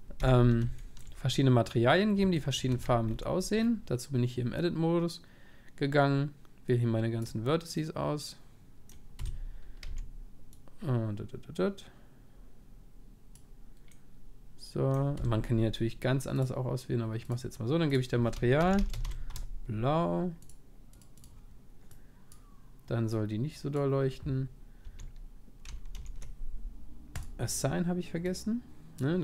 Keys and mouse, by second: 0.2 z, 2.7 a, 3.2 c, 3.7 middle click, 3.9-5.3 middle drag, 9.9 c, 17.3-25.1 drag, 24.8 a, 25.9 ctrl+z, 27.2-29.2 drag.